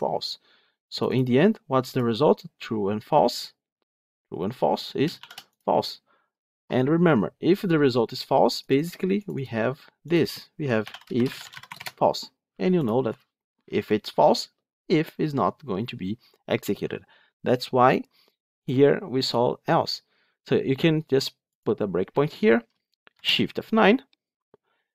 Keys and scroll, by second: 21.5 ctrl+F8, 23.0 shift+F9.